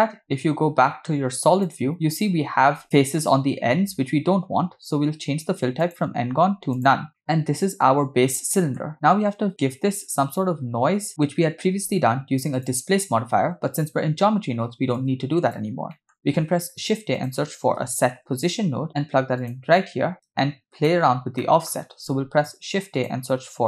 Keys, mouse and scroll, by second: 1.7 click, 5.8-6.9 drag, 7.1 scroll down 1, 7.2-8.8 middle drag, 12.5 click, 14.0-15.0 scroll down 5, 15.0-15.6 drag, 16.0 middle click, 16.3 shift+a, 20.1-20.9 drag, 21.4 middle click, 22.0 shift+a.